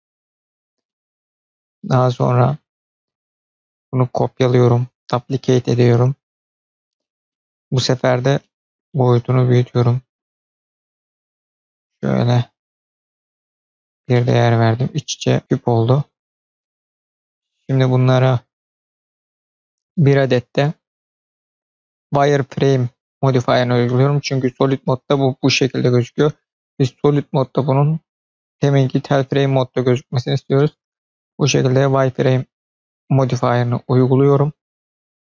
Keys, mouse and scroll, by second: 0.8-2.4 middle drag, 3.9-5.5 drag, 6.2 scroll down 1, 6.9 scroll down 4, 7.2-7.7 middle drag, 7.9-8.3 scroll up 2, 8.3 middle click, 9.7-13.4 drag, 13.7-14.0 scroll down 2, 14.0-15.4 middle drag, 17.1 click, 18.5 click, 20.0-23.3 drag, 24.7 click, 27.2-29.5 drag, 30.5-31.2 middle drag.